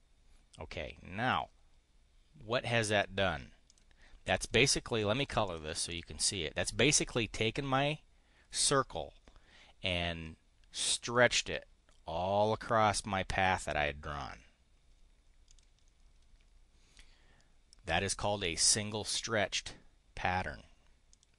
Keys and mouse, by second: 3.6 click, 4.2 click, 5.3 click, 5.8 click, 15.4 click, 21.0 click.